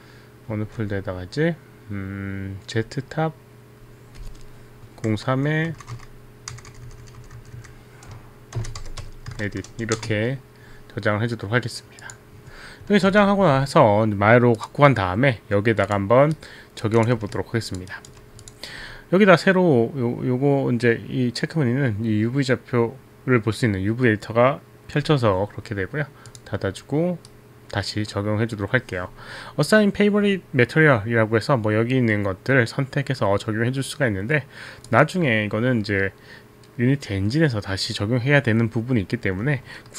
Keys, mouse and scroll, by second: 0.1 click, 0.6 z, 3.4 click, 6.1 click, 6.6 click, 6.8 right click, 7.4 right click, 9.2-9.9 typing, 10.0 Return, 12.1 click, 13.2 alt+Tab, 14.6 click, 15.9 click, 16.3 right click, 17.0 click, 17.9 alt+right click, 17.9 alt+click, 18.5 click, 18.5 alt+right click, 26.2 click, 26.8 click, 27.3 right click, 39.9 alt+middle click.